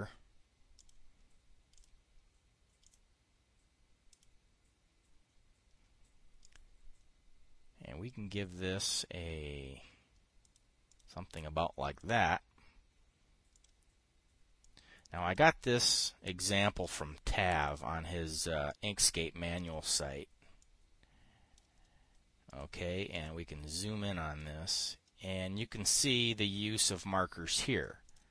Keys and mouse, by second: 1.3 click, 2.2 click, 3.3 click, 4.6 click, 6.9 click, 9.4 click, 10.9 click, 11.4 click, 12.4 click, 14.0 click, 15.1 click, 17.1-18.3 drag, 19.2-20.2 drag, 21.1-22.1 drag, 23.0 click, 23.6 click, 24.2 click, 26.0 click, 27.4-28.3 drag.